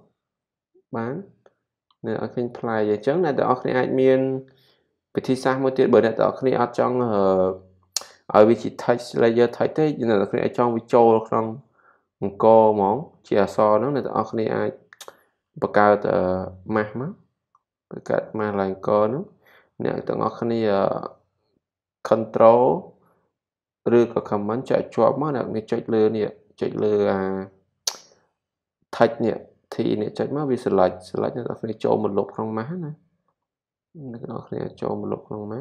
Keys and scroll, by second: 0.7 super+-, 2.4 z.